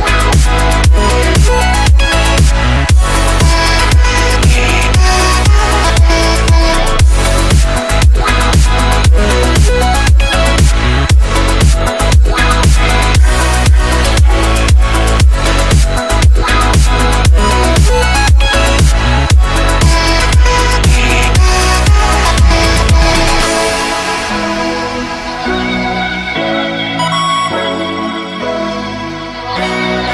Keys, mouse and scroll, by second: 0.2 Delete, 0.8 click, 1.0 Delete, 1.8-11.8 drag, 11.9 F10, 13.7 click, 18.3 right click, 18.6 scroll down 1, 19.3 right click, 20.9 scroll up 1, 21.9 right click, 22.3-23.1 scroll up 1, 23.7 click, 25.7 ctrl+c, 27.1 click, 27.8 right click, 28.5 click, 29.0 ctrl+v, 29.6 click.